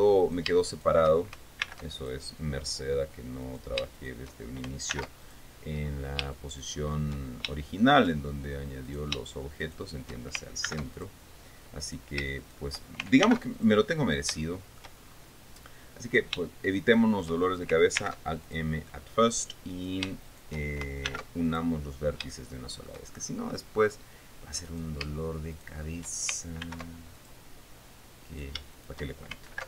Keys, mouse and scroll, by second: 0.8 shift+right click, 1.3 shift+right click, 2.2 alt+m, 2.6 alt+click, 4.0 right click, 4.5 shift+right click, 5.5 alt+m, 5.8 alt+click, 6.3 alt+scroll down 2, 6.9 shift+middle click, 7.8 shift+scroll up 2, 8.1 shift+middle click, 9.4 shift+right click, 10.2 shift+right click, 11.2 alt+m, 11.5 alt+click, 12.4 right click, 13.0 shift+right click, 13.8 alt+m, 14.1 alt+click, 14.6-14.9 alt+scroll down 3, 15.0 shift+middle click, 15.9 scroll up 2, 16.6 shift+right click, 17.4 shift+right click, 18.6 alt+m, 19.0 alt+click, 20.3 right click, 20.8 shift+right click, 21.6 alt+m, 22.0 alt+click, 22.5 alt+scroll down 1, 22.9 shift+middle click, 23.7-24.1 shift+scroll up 1, 25.2 right click, 26.1 shift+right click, 27.2 alt+m, 27.7 alt+click, 28.8 shift+right click, 29.3 shift+right click.